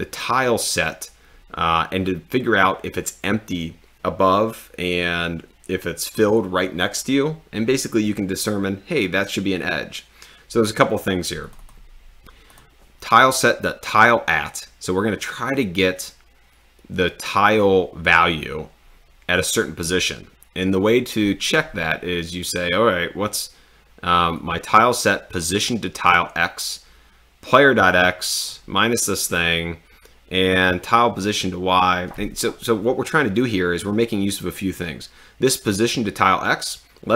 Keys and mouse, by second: 11.5 click, 12.7 click, 24.4 click, 25.4 click, 27.5 click.